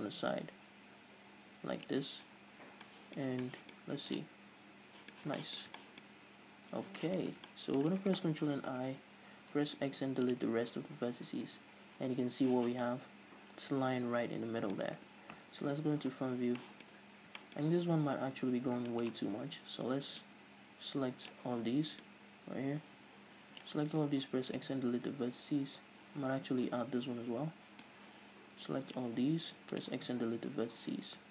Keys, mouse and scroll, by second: 2.4-2.9 scroll down 2, 2.9-8.7 shift+middle drag, 6.1-6.8 scroll up 2, 6.8-7.5 scroll down 4, 8.7 ctrl+i, 9.4 x, 11.3 scroll up 1, 11.5 Tab, 12.8 middle click, 15.3 KP_1, 16.1-16.6 scroll up 1, 16.6 shift+middle click, 17.0 scroll up 1, 17.4-20.2 shift+middle drag, 18.3 Tab, 18.6-18.9 scroll up 2, 20.2 click, 21.5 a, 22.0 click, 23.9 x, 27.9 click, 29.5 x, 30.2-31.3 scroll down 2.